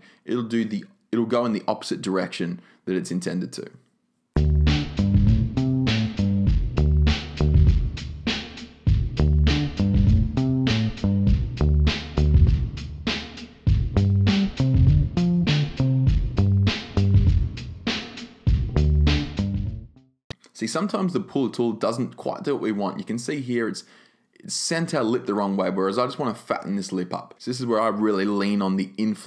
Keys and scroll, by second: 26.1 super+z.